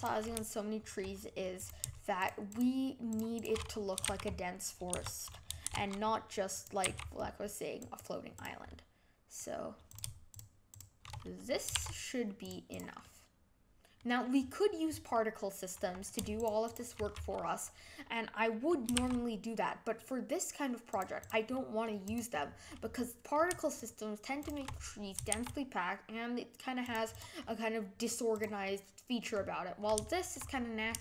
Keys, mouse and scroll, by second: 1.5 click, 2.1 shift+click, 2.4 shift+click, 3.0 shift+click, 3.3 shift+click, 4.0 shift+s, 5.6 shift+d, 6.8 g, 8.3 click, 8.6-9.8 middle drag, 9.8 click, 10.3 shift+click, 10.7 shift+click, 11.1 scroll down 1, 11.2-11.7 middle drag, 11.7 shift+d, 12.7 click, 13.0-16.3 middle drag, 16.3 shift+click, 16.6 shift+click, 17.0-18.9 middle drag, 18.9 shift+d, 21.2 click, 21.5-22.0 middle drag, 22.0 click, 22.4-23.7 middle drag, 23.7 shift+click, 24.4 shift+click, 25.3 shift+d, 27.1 click, 27.4-28.3 middle drag, 28.3 click, 28.6-29.3 middle drag, 29.3-30.0 scroll up 5, 30.0-31.0 shift+middle drag.